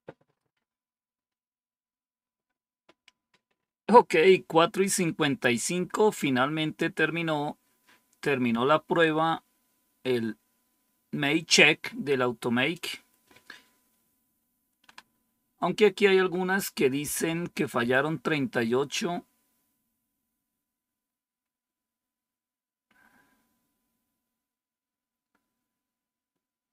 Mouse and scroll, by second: 12.6 click.